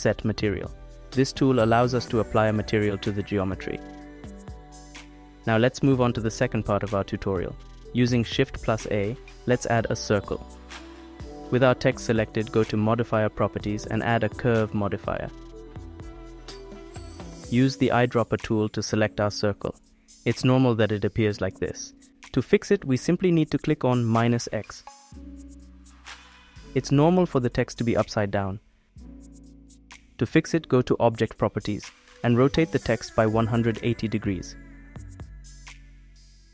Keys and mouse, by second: 1.5 BackSpace, 4.2 click, 9.3 shift+a, 12.4 click, 15.8-17.6 drag, 22.7 middle click, 23.9 middle click, 24.1 middle click, 24.2 click, 25.4 click, 26.3 click, 28.6 click, 29.3 middle click, 31.0 middle click, 33.3-35.3 middle drag.